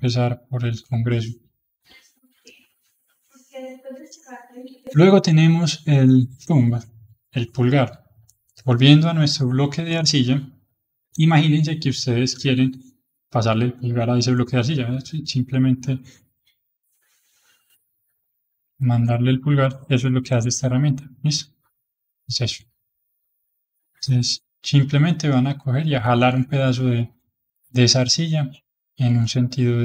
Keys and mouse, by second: 1.1-4.1 middle drag, 4.6-10.9 drag, 17.1-18.6 middle drag, 18.6-19.6 drag, 19.6-20.9 middle drag, 20.9-22.6 drag, 22.6-23.9 middle drag, 23.9-26.9 drag, 27.2 middle click, 28.1-29.8 drag.